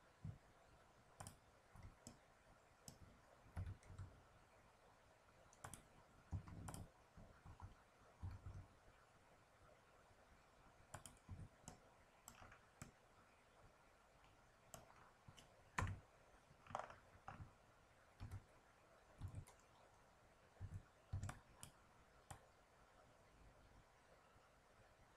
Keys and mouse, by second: 1.3 click, 2.0-3.1 middle drag, 3.5 s, 6.6-8.5 drag, 8.2 s, 11.2 Tab, 15.7 KP_1, 18.1 z, 19.2 Tab, 20.6 a, 21.1 b, 22.2-24.0 drag.